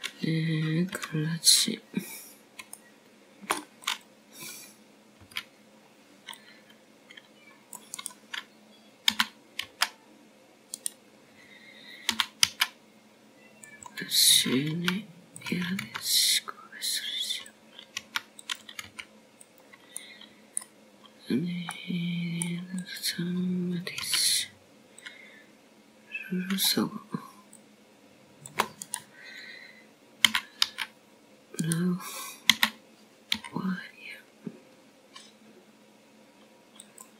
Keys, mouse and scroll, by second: 0.2 middle click, 3.8 KP_7, 4.9 scroll down 1, 5.6 shift+middle click, 6.7 click, 8.1 c, 12.0 s, 15.0 s, 17.6 r, 18.7 g, 20.9 r, 21.7 g, 22.9 middle click, 24.1-24.6 scroll down 3, 24.6 middle click, 25.7 click, 26.9 c, 33.1 s, 35.4 s.